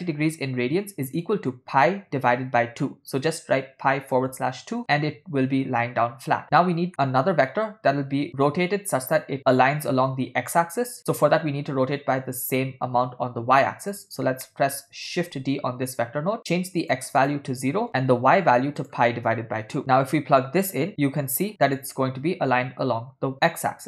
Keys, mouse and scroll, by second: 6.9 middle click, 13.9 click, 14.3 scroll up 2, 14.5 middle click, 15.4 shift+d, 17.3 click, 18.8 click, 19.8 ctrl+middle click, 20.8-22.0 drag.